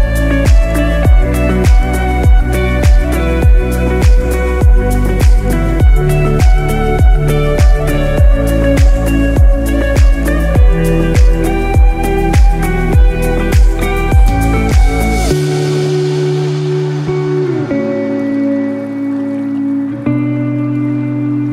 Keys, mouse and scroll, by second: 0.1 scroll up 3, 0.5 scroll down 1, 1.2-1.7 scroll down 1, 1.7 click, 4.5 KP_1, 5.4-5.8 scroll down 1, 7.1 alt+z, 7.5-8.0 scroll down 3, 7.9 shift+middle click, 8.2 scroll up 2, 8.8 click, 8.8 scroll up 3, 10.6 scroll down 2, 10.9 middle click, 13.0 x, 14.9 scroll up 1, 15.2 scroll down 1, 15.5 middle click, 17.4 alt+z, 18.3 Tab, 19.8 g.